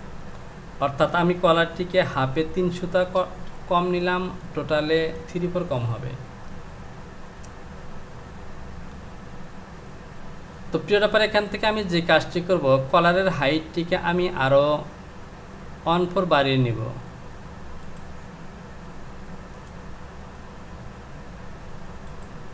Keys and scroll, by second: 3.2 Return.